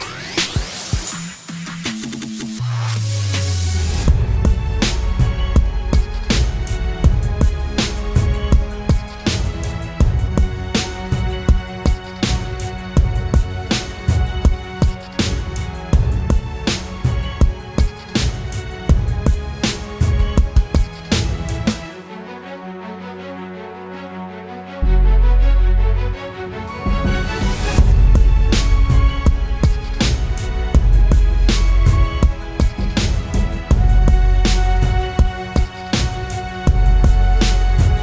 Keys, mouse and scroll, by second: 6.5-8.1 typing, 12.0-13.0 typing, 14.9-15.6 typing, 25.9 right click.